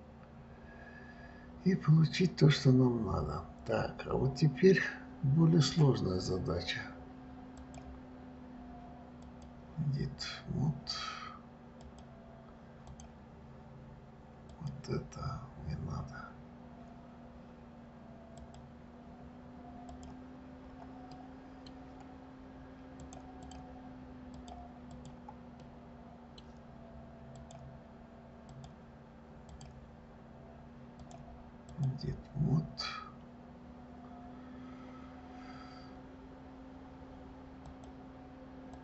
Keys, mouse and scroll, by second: 3.5-4.0 scroll up 2, 4.0-7.0 middle drag, 7.9-11.0 drag, 12.2 click, 13.2 click, 14.8 click, 18.7 click, 20.3 click, 21.5-23.4 middle drag, 23.4 click, 23.8 click, 24.7 click, 25.3 click, 25.9-27.7 middle drag, 27.7-30.0 drag, 31.4-34.4 drag, 38.0 click.